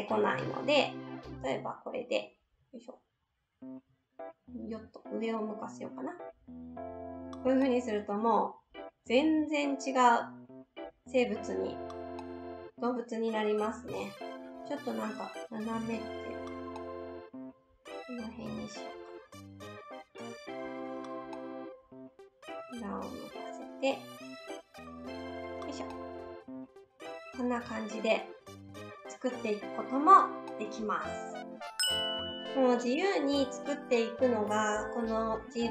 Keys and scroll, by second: 0.4 ctrl+z, 15.7 ctrl+z.